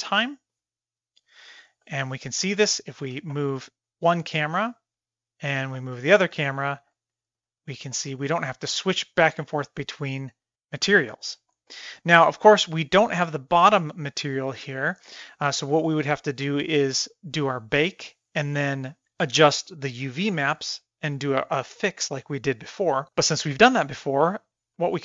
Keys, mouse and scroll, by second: 0.0 middle drag, 0.3 middle drag, 1.2 click, 1.9 middle click, 3.1 g, 5.6 g, 6.9-7.4 middle drag, 7.7 shift+middle click, 8.9-9.2 shift+middle drag, 10.9 middle drag, 11.7 middle drag, 11.9 middle drag, 12.3 middle click, 12.6 middle click, 13.7-14.5 middle drag, 15.2-17.0 middle drag, 17.8-18.4 middle drag, 22.1-22.7 middle drag, 22.9 middle click, 23.2-24.6 middle drag.